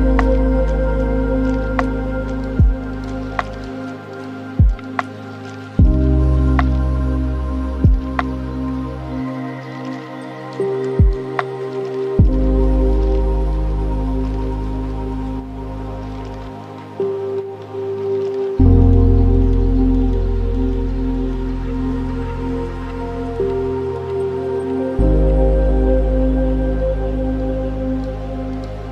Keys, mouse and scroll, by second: 0.4-2.8 drag, 2.8 scroll down 1, 2.8 scroll up 1, 2.8 scroll down 1, 3.3 middle click, 4.1-4.5 scroll down 2, 4.5 click, 5.1 click, 6.0 middle click, 6.9 shift+a, 10.4-11.4 alt+right drag, 11.4 scroll down 1, 11.4-11.8 scroll up 5, 11.8-12.2 scroll down 1, 12.2-13.0 ctrl+middle drag, 13.0-16.0 drag, 16.3-18.6 drag, 18.6-19.0 scroll down 3, 19.0-19.6 middle drag, 19.6 click, 20.1 shift+d, 21.6-23.4 drag, 23.4-24.3 alt+right drag, 24.3-24.6 scroll down 6, 24.6 middle click, 25.1 click, 25.8 click, 27.2 click, 28.1-28.9 middle drag.